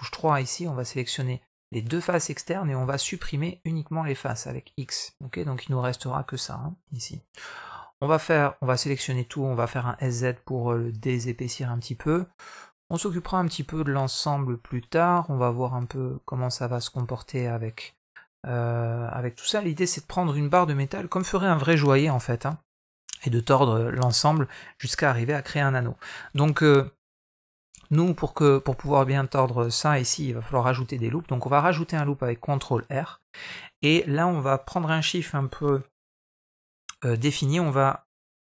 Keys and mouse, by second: 0.2 click, 0.5 middle click, 1.7 shift+click, 2.6 x, 4.4 middle click, 5.8 middle click, 6.8 middle click, 8.6 a, 9.4 s, 13.0-17.3 middle drag, 17.8 middle click, 25.3 middle click, 30.6 ctrl+r.